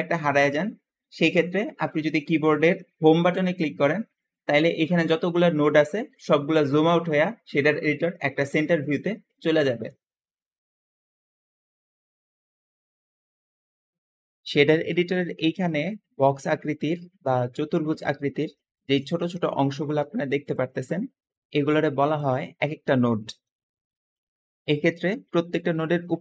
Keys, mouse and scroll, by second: 0.2 middle click, 3.2 Home, 6.9-8.6 middle drag, 6.9-8.2 scroll up 2, 8.2-8.6 scroll down 1, 8.8-9.8 middle drag, 8.8-9.5 scroll up 1, 13.6-15.1 middle drag, 14.2-14.7 scroll up 2, 15.6 `, 15.9-16.9 drag, 17.4 click, 18.5 click, 18.7 Escape, 19.8 middle click, 19.8 scroll down 1, 19.8 g, 21.1 click, 21.3 g, 21.9 right click, 22.3-23.4 middle drag, 22.3-23.1 scroll up 2, 23.1-24.0 scroll up 2, 23.5 middle click, 25.1 `.